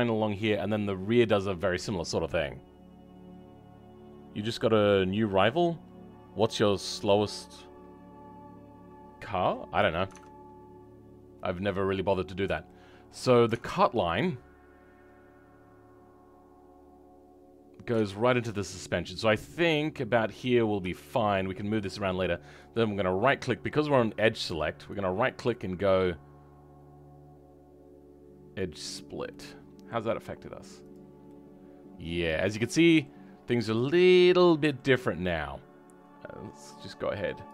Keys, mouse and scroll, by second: 12.6 shift+middle click, 21.1-28.7 shift+middle drag, 29.2-30.8 middle drag, 30.8 click, 31.2-32.3 middle drag, 32.7 middle click, 33.1-33.7 scroll up 2, 33.7-36.6 middle drag, 36.6 click.